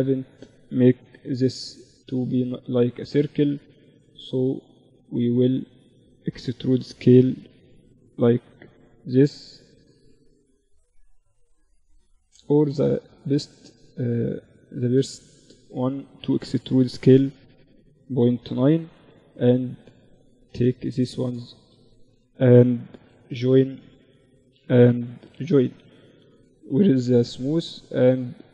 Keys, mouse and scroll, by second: 0.0 ctrl+2, 1.1 Tab, 2.9-5.5 drag, 3.2 z, 3.6-4.7 right drag, 3.8 z, 5.7 e, 8.3-12.8 middle drag, 9.6-11.0 drag, 9.6-11.6 right drag, 12.8-15.6 drag, 12.8-14.5 right drag, 15.6 middle click, 15.6 e, 16.1 middle click, 19.1 click, 19.6-25.7 right drag, 20.5 click, 22.2 j, 24.2 j, 24.7 Tab, 25.7 t, 26.4-28.5 drag, 26.5 t.